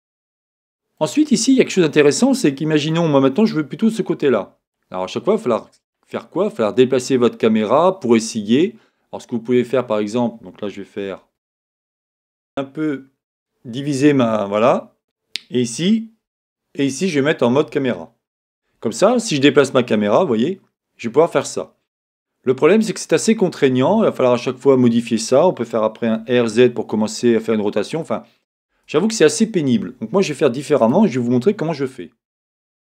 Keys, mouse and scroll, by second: 0.4-8.8 middle drag, 12.8-14.9 drag, 17.7 KP_0, 19.9-22.9 drag, 26.0 r, 30.8-32.9 right drag, 32.0 click.